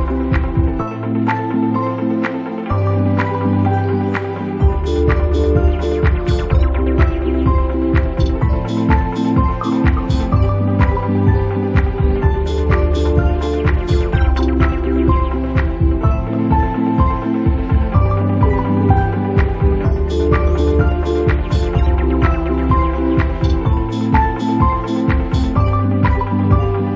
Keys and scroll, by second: 19.2 space, 23.7 ctrl+z.